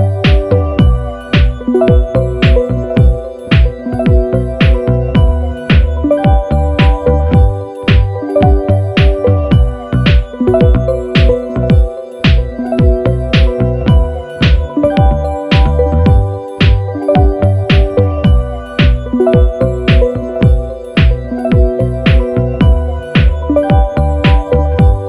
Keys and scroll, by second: 20.3 Escape, 20.7 super+-, 22.2 i.